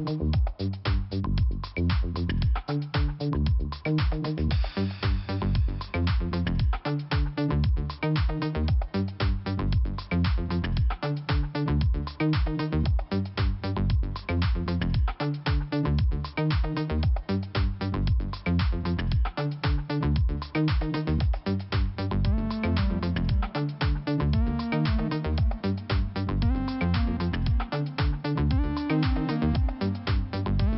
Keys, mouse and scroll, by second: 3.7 click, 4.9 click, 7.1 scroll up 1, 8.2 click, 9.8-10.1 scroll down 2, 11.1 click, 12.6 click, 12.7 click, 13.4-14.7 scroll down 2, 14.9 click, 15.5 scroll up 1, 15.8 click, 15.9 click, 18.7 Return, 20.2 click, 20.3 click, 21.8 click, 21.8 click, 23.0 click, 24.8 click, 24.8 click, 25.3 scroll down 2, 26.9 click, 26.9 scroll down 1, 29.6 scroll up 1, 30.2-30.7 scroll up 1.